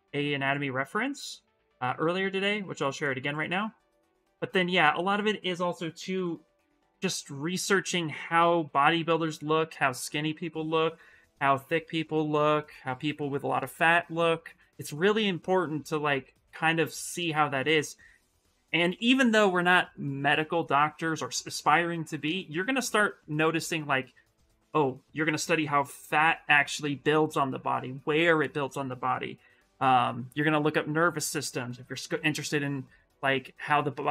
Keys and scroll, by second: 6.7 Return.